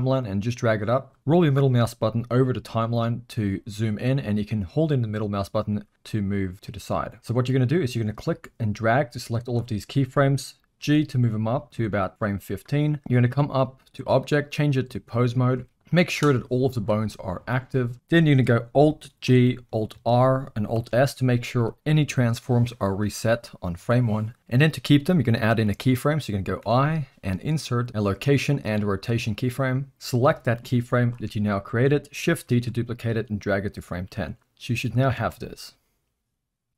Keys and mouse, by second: 0.2 click, 4.2-5.2 middle drag, 5.7 middle click, 6.5-7.2 middle drag, 7.6-9.5 drag, 10.8 g, 13.0 Tab, 13.8-15.0 drag, 15.7 middle click, 16.4 click, 17.3 z, 19.2 alt+g, 19.9 alt+r, 20.7 alt+s, 29.9-31.2 drag, 32.5 shift+d, 35.1 space.